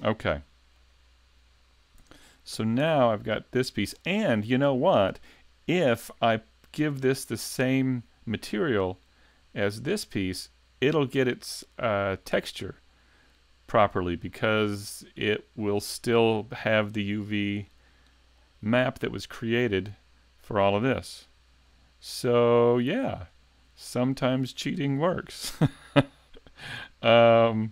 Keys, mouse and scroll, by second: 1.4-2.0 scroll down 1, 2.0-2.6 scroll down 4, 2.0 a, 2.6 shift+middle click, 3.6 right click, 4.0 shift+middle click, 4.0-4.6 shift+scroll up 1, 5.9 scroll up 2, 12.8-13.8 scroll down 1, 13.8-14.4 scroll down 1, 14.4 right click, 14.4-16.0 scroll up 1, 19.5-21.0 scroll down 3, 21.1 shift+middle click, 23.3 shift+middle click, 25.1 shift+middle click.